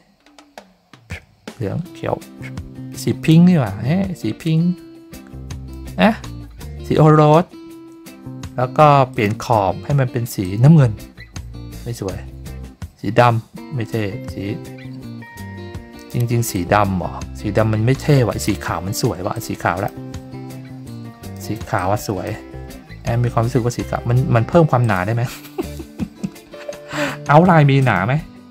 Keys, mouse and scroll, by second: 9.1 click, 10.4-15.9 drag, 16.5-18.4 drag, 19.3 click, 20.8-21.3 drag, 21.7-22.2 drag, 24.8 click, 27.8 right click.